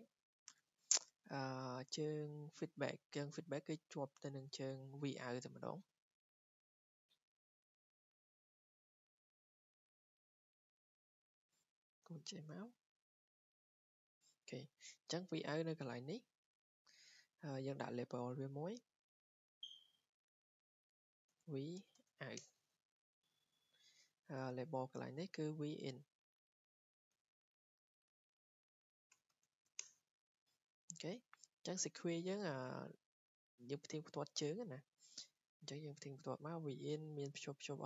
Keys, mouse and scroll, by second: 0.1 click, 5.7 click, 6.3 Escape, 9.1 w, 9.7 click, 11.6 click, 12.5 click, 14.1 click, 14.6 Escape, 14.8 Escape, 15.0 Escape, 17.3 scroll, 18.1 click, 18.5 click, 20.0 click, 20.3 Escape, 20.5 click, 20.7 click, 21.1-22.5 typing, 22.8 Escape, 23.2-23.6 scroll down 4, 24.3-24.7 scroll up 3, 24.7 scroll, 25.5 click, 26.8 click, 27.2 Escape, 27.5 click, 27.7 click, 28.3-30.0 typing, 30.2 Escape, 30.7-31.6 scroll, 31.3-32.0 typing, 32.8 click, 34.0 click.